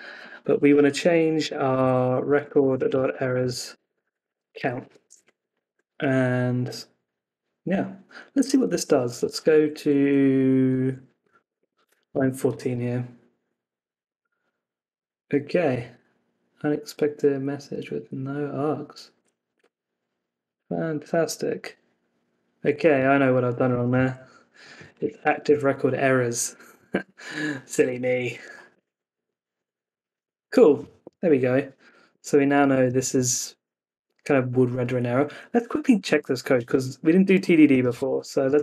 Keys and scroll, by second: 1.7 Left, 4.8 Escape, 5.0 super+s, 8.7 super+s, 9.2 super+Tab, 12.1 Return, 22.9 super+Tab, 25.1 Escape, 25.4 super+s, 27.7 super+Tab, 28.4 Up, 28.7 Return, 32.0 super+Tab.